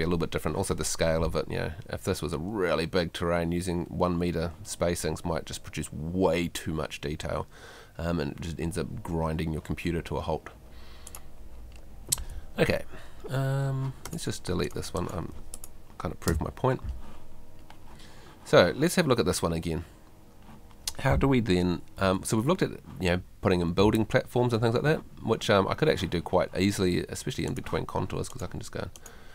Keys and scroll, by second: 12.4 Escape, 16.3 BackSpace, 22.0 F3, 23.8 F2.